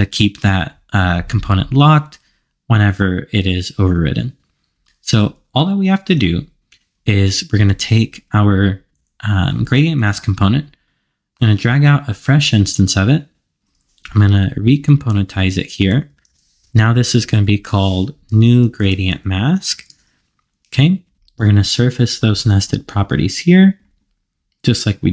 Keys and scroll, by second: 14.8 alt+super+k, 16.3 super+r, 17.3 alt+shift+Left.